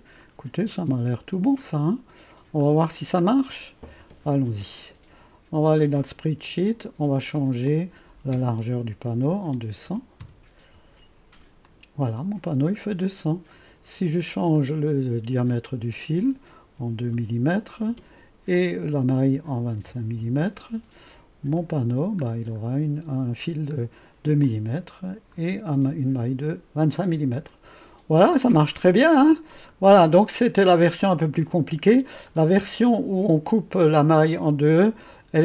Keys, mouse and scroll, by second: 0.3-0.8 scroll down 1, 0.8 right click, 1.8-2.7 scroll up 1, 2.7 right click, 3.4-3.7 scroll down 1, 3.7 typing, 6.1 click, 7.7 click, 9.3-9.9 typing, 10.3 Return, 11.7 click, 12.6-14.6 scroll up 1, 14.6 click, 15.8 click, 16.9-20.3 typing, 18.6 click, 21.6 click, 22.2 click, 22.5-23.5 scroll up 1, 24.5 click, 28.2-28.9 typing, 28.4 click, 28.8-29.9 scroll up 1, 30.5-32.5 drag, 32.5-35.1 scroll up 1.